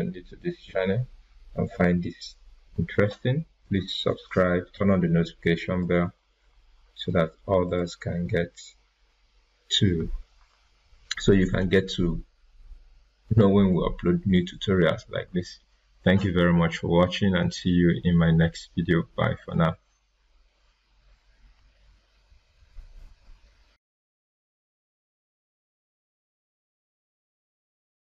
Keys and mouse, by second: 3.6-7.6 drag, 4.5-5.8 drag.